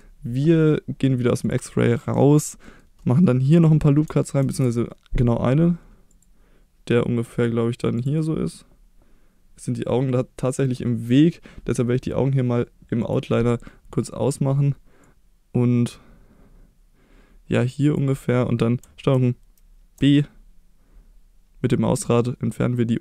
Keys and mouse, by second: 2.0 middle click, 2.6 middle click, 3.0 middle click, 3.4 middle click, 4.4 ctrl+r, 7.9 click, 8.1-9.7 middle drag, 13.0 click, 13.7 middle click, 15.1-17.9 drag, 19.1 ctrl+b.